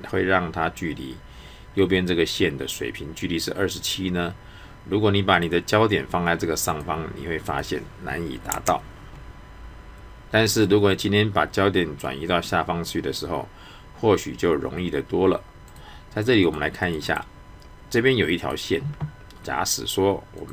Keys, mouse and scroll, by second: 5.3 click, 15.7 click, 17.1 right click, 18.4 click.